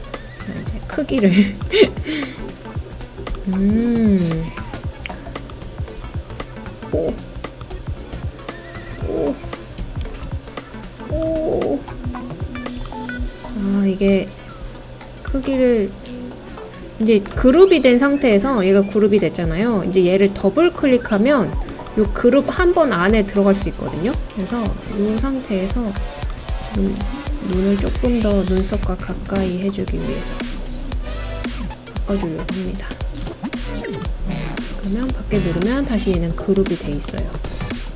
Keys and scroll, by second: 9.8 Tab, 10.0 Tab, 10.2 Tab.